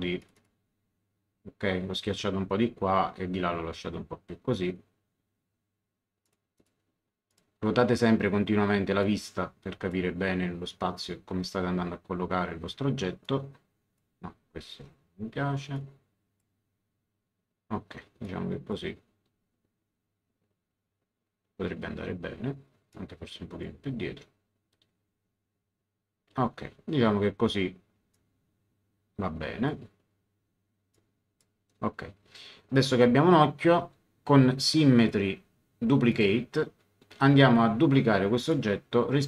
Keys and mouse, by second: 0.2 click, 6.2 click, 9.0 click, 13.2 click, 14.7 ctrl+z, 15.7 click, 18.2 click, 22.9 click, 28.1 click, 30.9 click, 32.7 click, 34.9 click, 36.1 click, 38.4 click.